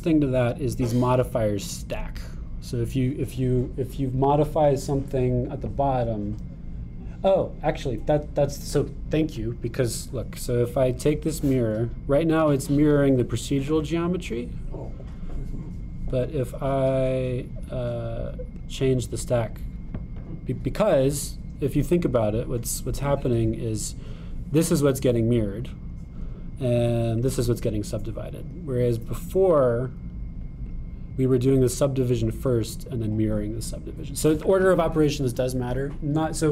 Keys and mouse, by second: 12.0-15.8 drag, 17.4-19.7 drag, 24.4 click, 28.2 click, 30.5-31.9 drag.